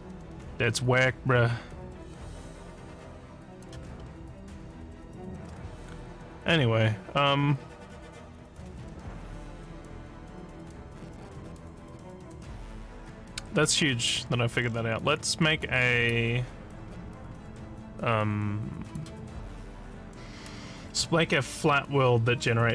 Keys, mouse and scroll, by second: 4.0-5.4 alt+middle drag, 14.6 alt+scroll up 1, 15.4 alt+middle click, 16.1-19.0 alt+drag.